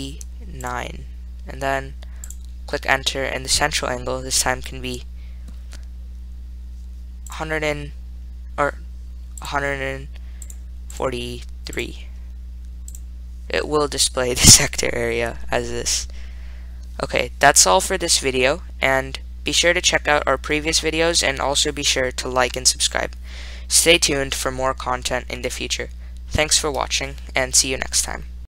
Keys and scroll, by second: 0.0-1.4 typing, 2.6 Return, 7.3-8.1 typing, 9.6 Left, 10.7 1, 11.2 4, 12.0 3, 13.2 Return, 14.4-15.1 typing, 27.2-27.9 typing.